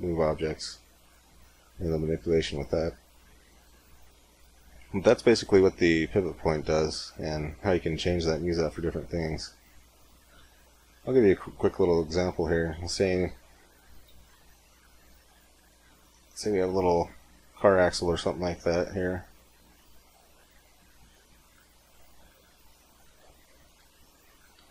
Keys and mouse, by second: 1.7-4.8 middle drag, 6.5 middle click, 9.1 x, 10.2 shift+a, 12.8 middle click, 13.5 middle click, 13.7 r, 17.2 middle click, 18.1 s, 19.1 s, 20.2 s, 23.4 middle click, 24.2 g, 24.4 g.